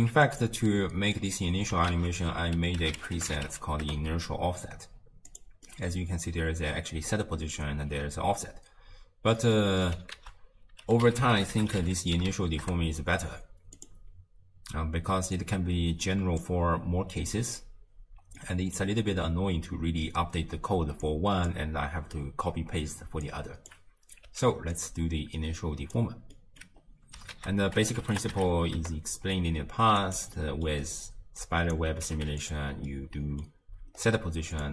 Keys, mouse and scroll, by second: 0.7 middle click, 1.2-1.7 scroll up 3, 1.9 ctrl+a, 5.7-8.7 middle drag, 10.2 ctrl+a, 15.4 click, 17.9-18.4 scroll up 1, 18.4-21.0 middle drag, 21.0 click, 23.3 click, 24.3 x, 24.8 click, 26.3 middle click, 26.9-27.3 scroll down 1, 27.3 ctrl+a, 30.4 middle click, 30.9-31.4 scroll down 2, 31.4 click, 32.1 g, 32.9-33.9 middle drag, 33.9-34.6 scroll up 3, 34.6 click.